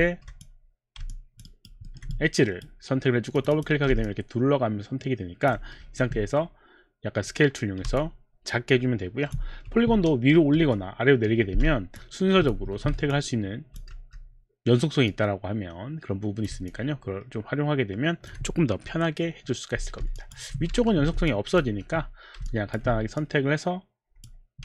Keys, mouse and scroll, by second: 0.0 alt+click, 0.8 alt+click, 1.1 alt+click, 1.5 alt+right click, 1.9 alt+middle click, 2.1 alt+right click, 2.1 alt+middle click, 3.3 click, 3.5 click, 4.1 alt+click, 5.8 r, 6.4 middle click, 8.0 alt+click, 9.5 4, 12.0 alt+click, 12.6 5, 13.2 alt+click, 14.0 r, 15.1 click, 16.7 alt+click, 17.7 alt+click, 20.1 alt+click, 20.7 4, 21.3 alt+click, 21.7 5, 22.4 alt+click, 23.2 click.